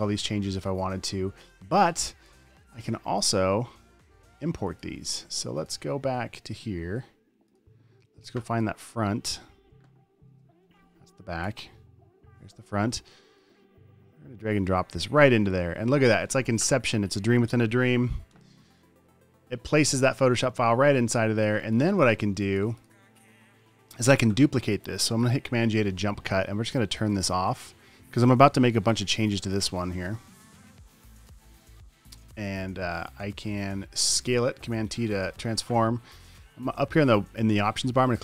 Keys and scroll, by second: 10.6 space, 12.2 Up, 12.8 space, 18.7 Return, 21.9 super+space, 22.6 space, 25.8 super+j, 32.1 space, 32.8 super+f, 33.7 space, 34.3 space, 35.0 super+t.